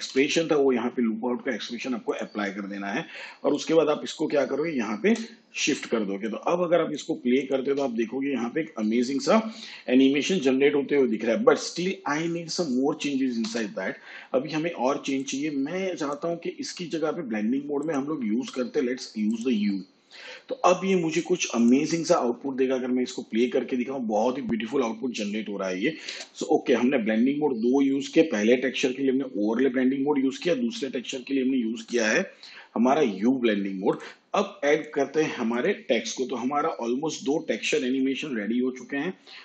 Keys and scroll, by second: 7.6 space, 13.3 space, 22.2 space, 26.0 space.